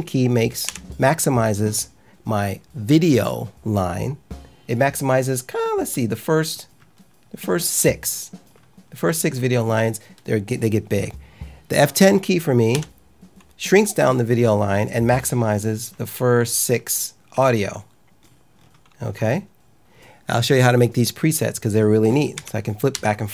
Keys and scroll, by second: 0.6 F9, 12.7 F10, 22.3 F9, 22.8 F10.